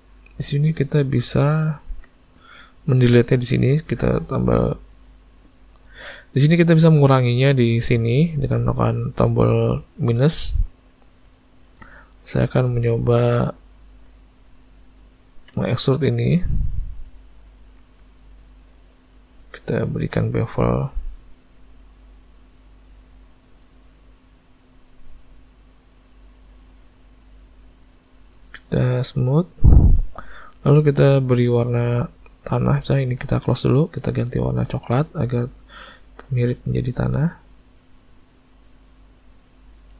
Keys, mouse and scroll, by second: 0.0 click, 1.3 z, 4.6 click, 10.4 middle click, 10.8 middle click, 11.7 alt+a, 12.1 click, 12.9 Tab, 13.2 a, 15.5 e, 17.8 Tab, 19.8 click, 20.5 click, 23.3 middle click, 24.7 click, 24.9 click, 25.1 click, 25.3 click, 25.5 click, 25.9 click, 28.3 right click, 31.2 click, 33.8 click, 34.7 click, 36.1 click.